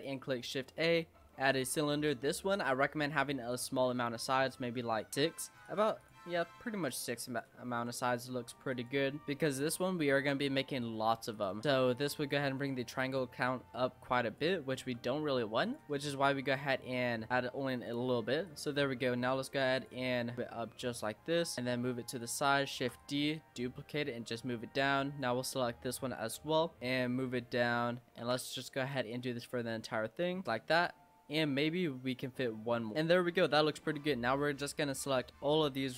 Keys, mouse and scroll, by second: 2.5-5.8 drag, 6.0 click, 7.7 s, 9.2 click, 9.5-9.9 scroll up 3, 9.9 shift+middle click, 10.4 g, 11.6 s, 12.3-13.4 middle drag, 13.4 click, 14.8 s, 15.8 middle click, 16.5 click, 17.3 click, 18.4 click, 19.8 click, 20.1 scroll down 3, 22.7 shift+d, 23.3 click, 26.4 l, 28.2 shift+d, 28.9 click, 31.4 click, 32.5-32.9 scroll up 1, 32.9 click, 33.6 click, 33.9-35.9 typing.